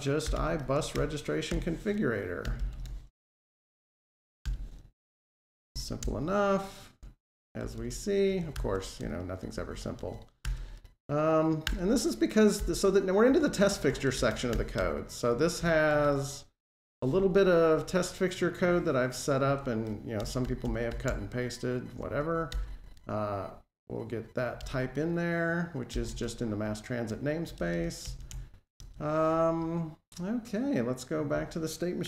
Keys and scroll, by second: 4.3 Return, 8.4 alt+Home, 14.4 Delete, 15.9 ctrl+Tab, 18.5 super+c, 19.3 ctrl+Tab, 21.8 alt+super+Right, 22.3 super+v, 24.4 alt+Return, 31.9 F12.